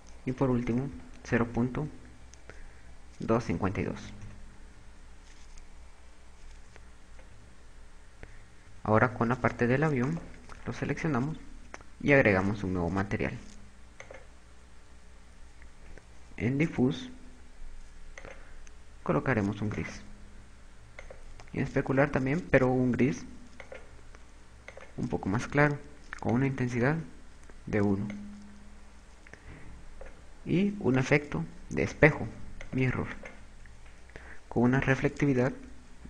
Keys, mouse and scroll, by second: 9.8 right click, 12.5 click, 14.4 click, 18.4 click, 21.4 click, 26.9 click, 28.7 click, 31.6 click, 32.2 click.